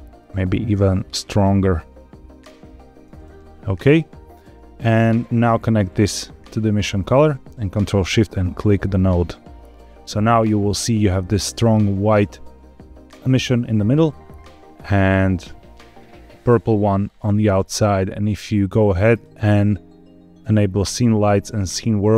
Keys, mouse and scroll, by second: 5.1-6.6 drag, 8.6 ctrl+shift+click, 14.8-16.1 scroll down 2, 16.1-17.9 scroll up 2, 19.0-22.1 drag.